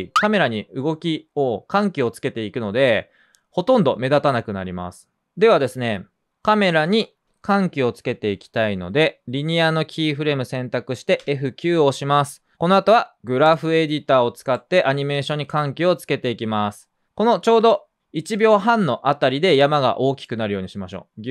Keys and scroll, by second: 2.3 c, 11.1 F9.